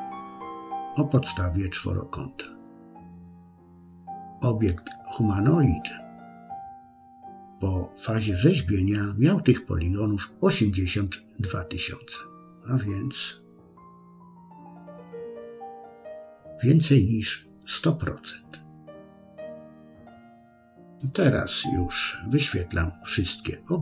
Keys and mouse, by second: 3.3 click, 3.9 click, 11.7 click, 12.6 click, 19.7 click.